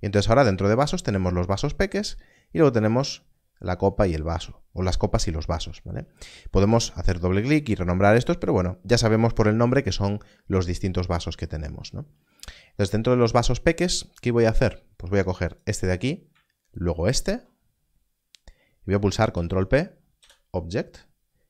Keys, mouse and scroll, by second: 2.0-2.3 scroll down 1, 6.7 click, 7.5 Escape, 14.9 Escape, 16.7 shift+click, 17.7 scroll up 1, 19.3 ctrl+p, 20.1 Return.